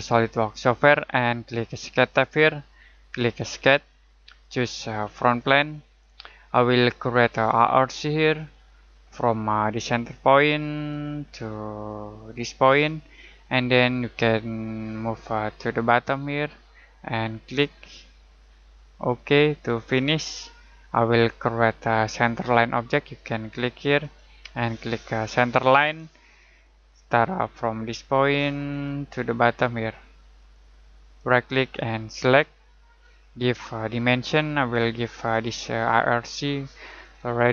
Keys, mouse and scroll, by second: 2.2 click, 8.2 click, 10.9 click, 17.4 click, 24.0 click, 28.7 click, 31.1 right click, 32.2 click.